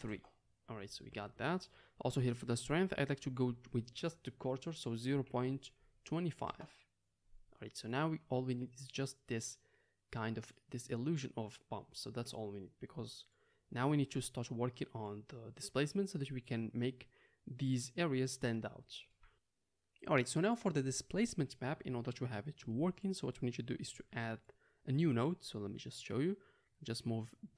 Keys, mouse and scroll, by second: 3.3-19.3 drag, 19.3-25.4 middle drag, 25.4 drag, 25.5-26.6 middle drag, 26.6-27.5 drag.